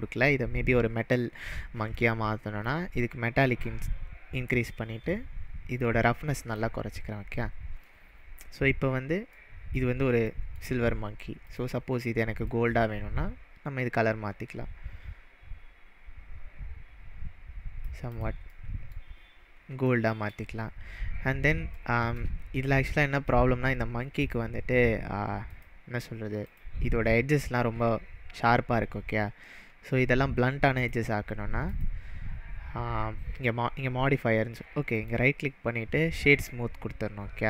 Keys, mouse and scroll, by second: 2.6-3.8 drag, 5.8-6.7 drag, 7.8-8.4 middle drag, 11.5 click, 18.1 click, 18.5-19.0 middle drag, 20.8-21.1 scroll up 4, 21.7-22.3 shift+middle drag, 23.2-23.8 scroll up 3, 24.1 click, 25.0 click, 25.7 click, 26.4 click, 30.8 click, 31.7 click, 34.9 right click, 36.1-37.4 right drag, 36.1 click.